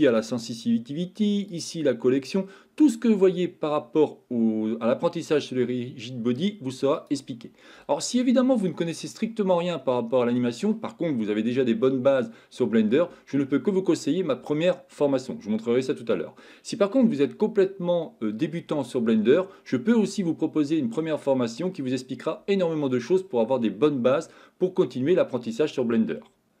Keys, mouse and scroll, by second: 0.2 click, 0.7 click, 1.7 click, 8.6-10.4 middle drag, 19.6-21.0 middle drag.